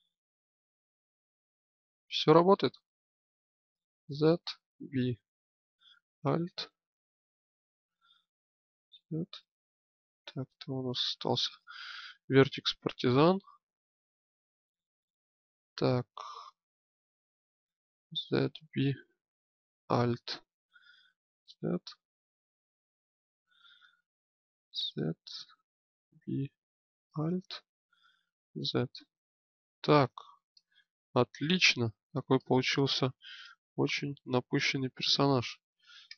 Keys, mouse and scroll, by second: 3.5 z, 4.4 b, 8.2 z, 15.7 click, 17.6 z, 18.2 b, 20.7 z, 21.6-23.8 drag, 24.3 z, 25.8 b, 28.1 z, 32.1 click, 35.9 Tab.